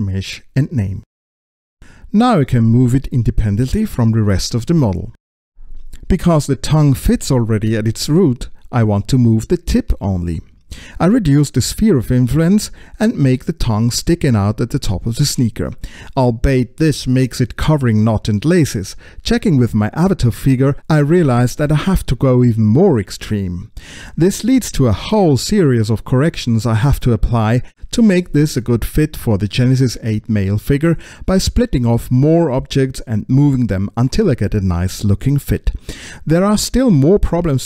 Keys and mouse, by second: 1.8 click, 2.9 space, 3.7-10.2 drag, 10.5 middle click, 12.1-18.9 drag, 20.9 click, 23.3 middle click, 25.0 space, 25.3 click, 25.9 space, 26.2 right click, 26.8 right click, 27.4 click, 28.2 ctrl+l, 28.4 click, 29.7 p, 30.2 p, 30.2 s, 30.7-31.8 shift+drag, 31.8 p, 32.3 click, 32.8 click, 34.0 click, 34.5 click, 35.9 click, 36.3 middle click, 36.6 click, 36.8 middle click, 37.1 click.